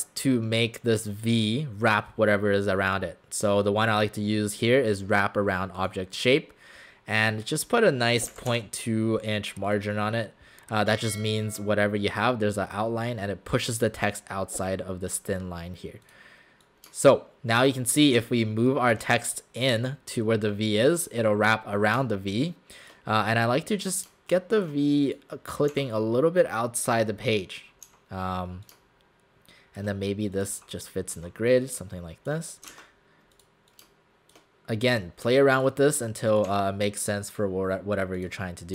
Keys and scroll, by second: 8.1-9.0 typing, 25.8 w, 30.6 w, 32.8 ctrl+z, 36.5 w.